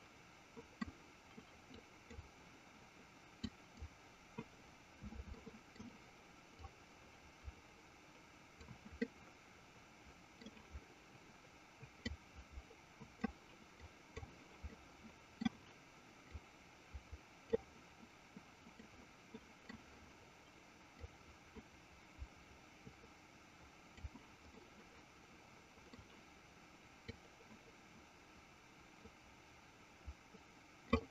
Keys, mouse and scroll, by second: 1.9 click, 3.5 click, 5.4 middle click, 6.8-8.8 drag, 9.1-10.5 middle drag, 12.2-13.4 drag, 14.0 click, 14.9 middle click, 16.4-17.7 drag, 18.8 middle click, 21.2-24.3 drag, 24.7-26.1 middle drag, 27.3-31.0 drag.